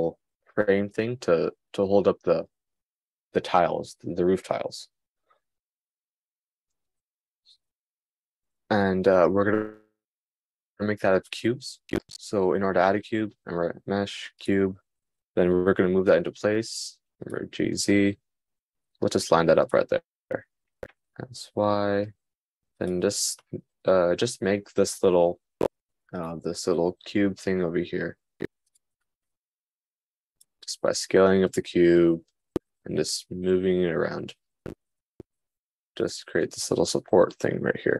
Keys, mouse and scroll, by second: 16.6 g, 19.7 g, 21.1 s, 26.1 s, 27.6 g, 29.3 s, 31.0 g.